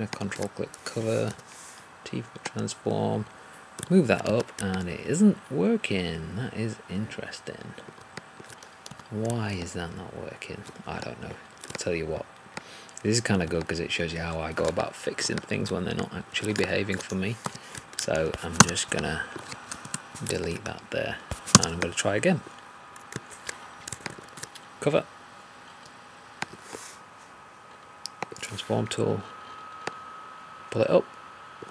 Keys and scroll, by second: 8.8 2, 17.4 3.